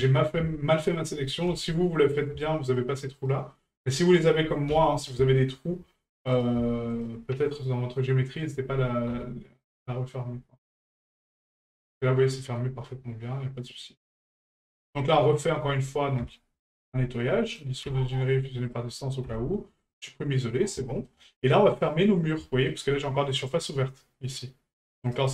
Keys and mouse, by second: 0.9 shift+right click, 2.1 right click, 2.7 shift+right click, 3.2 shift+right click, 4.0 shift+right click, 5.4 shift+middle drag, 6.3 right click, 6.9 shift+right click, 7.6 shift+right click, 8.4 shift+right click, 9.6-10.7 middle drag, 11.2-11.8 middle drag, 12.6-14.1 middle drag, 16.2 a, 20.8 shift+middle drag, 21.9-22.2 middle drag, 22.4 shift+middle drag, 23.4 right click, 24.1 middle click, 25.0 right click.